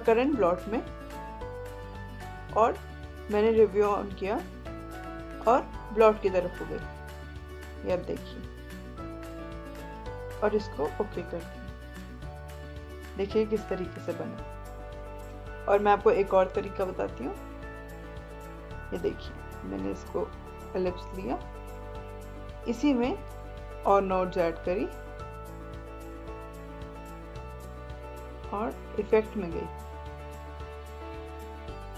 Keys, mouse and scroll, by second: 0.2-10.3 drag, 12.1 click, 16.4-23.3 drag.